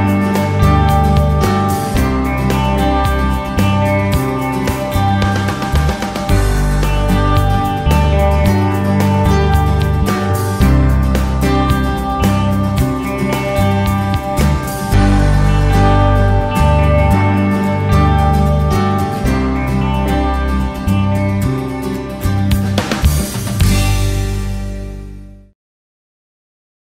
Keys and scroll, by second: 8.7 w, 9.9 space, 15.0 w, 16.3 space, 19.1 d, 20.3 a, 22.6 s, 24.8 d, 26.3 w.